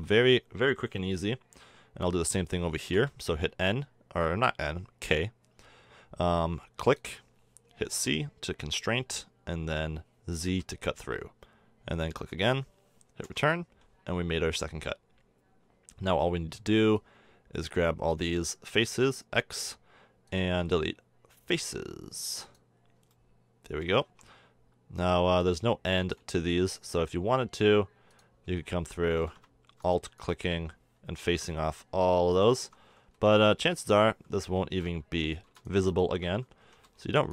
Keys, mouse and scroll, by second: 2.9 k, 16.5 b, 18.8 x, 23.0 middle click, 23.8 a, 24.0 Tab, 25.6 middle drag, 26.0 middle click, 26.7 Tab, 28.4 a, 31.2 alt+super+f, 33.1 f, 34.4 f, 35.0 space, 36.6 f.